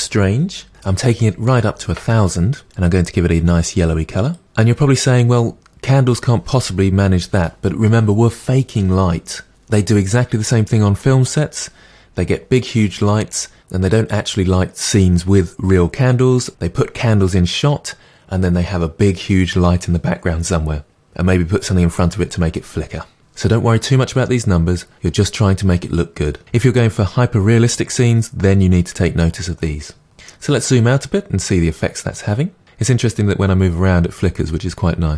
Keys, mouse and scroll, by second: 0.7 0, 4.3 click, 30.1-31.2 scroll down 8, 31.5-33.5 middle drag.